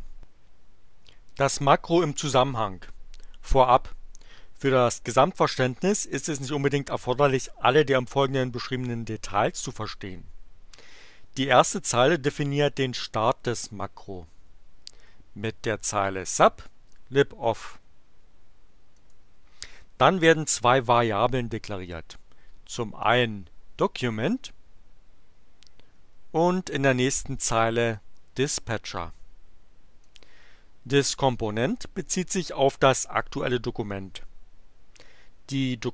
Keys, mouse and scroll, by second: 16.0 click, 18.9 click, 23.0-24.7 drag, 26.8-28.1 drag, 30.0 click.